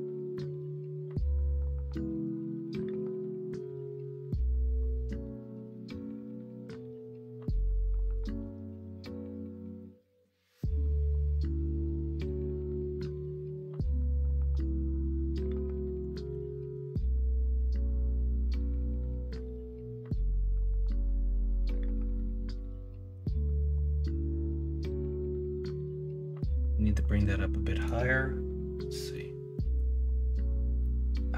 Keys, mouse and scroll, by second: 8.6-11.8 middle drag, 18.3-22.6 middle drag, 22.9 middle click, 23.4 middle click, 26.9 middle click, 29.1 middle click, 30.8-31.3 middle drag.